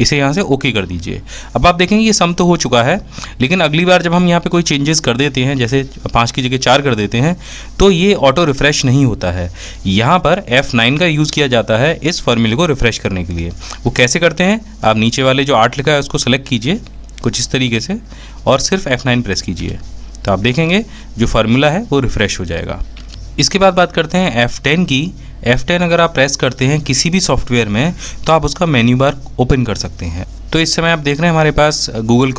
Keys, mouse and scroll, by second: 23.2 f, 23.4 F1, 32.2 f.